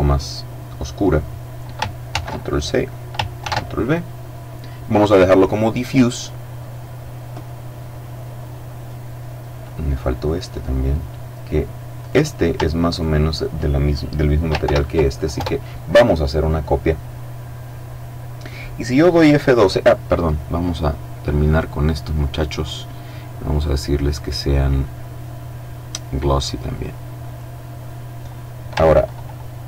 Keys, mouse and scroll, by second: 1.3 ctrl+c, 2.7 ctrl+v, 11.2 right click, 12.2 shift+right click, 13.9 ctrl+l, 14.6 ctrl+Return, 20.8 right click, 21.6 click, 22.8 click, 26.5 click, 29.2 ctrl+s.